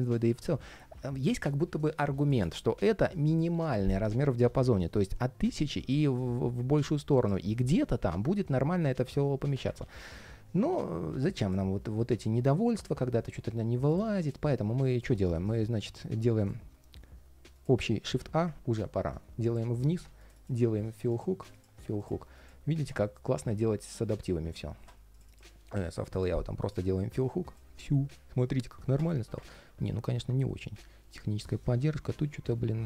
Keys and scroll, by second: 9.5 super+z, 12.9 super+z, 13.9 super+z, 14.9 alt+i, 27.5 ctrl+shift+4.